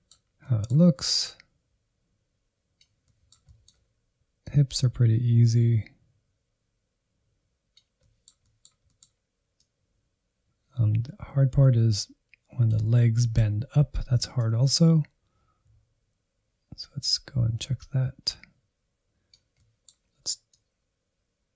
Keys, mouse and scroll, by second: 0.2 scroll down 2, 0.4 middle click, 1.3-3.0 drag, 3.0-4.5 middle drag, 4.5-7.9 drag, 7.9-9.6 middle drag, 9.6-12.9 drag, 12.9-14.4 middle drag, 14.4-19.3 drag, 19.5-20.5 middle drag, 20.5-21.5 drag.